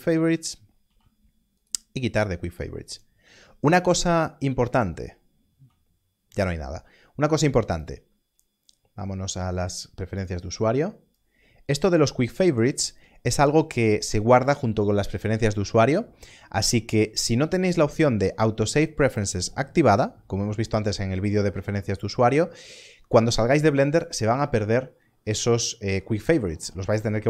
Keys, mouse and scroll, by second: 0.2 click, 0.8 q, 1.5 right click, 2.9 click, 5.5 q, 7.7 click, 10.1 click, 17.4 click.